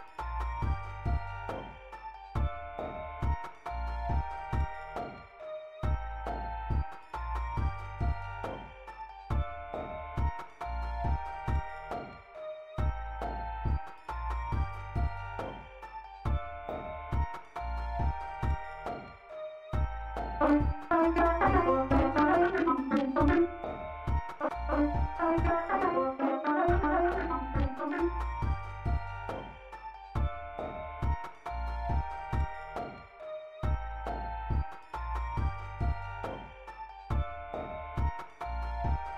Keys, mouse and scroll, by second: 10.2 click, 13.5-15.2 drag, 16.2 click, 18.1 click, 19.4 click, 20.3 space, 29.0 space, 32.6 click, 37.0 click.